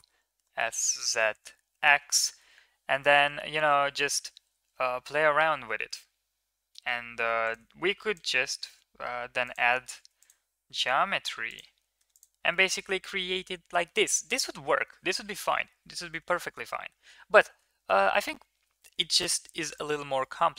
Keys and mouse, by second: 2.7 e, 7.8 ctrl+r, 9.9 ctrl+r, 12.0 Tab, 12.3-13.9 middle drag, 15.9 ctrl+z, 16.2 ctrl+z, 16.3 ctrl+z, 16.7 ctrl+z, 16.9 ctrl+z, 17.3 ctrl+z, 17.7 ctrl+z, 19.5 middle click, 20.0 middle click.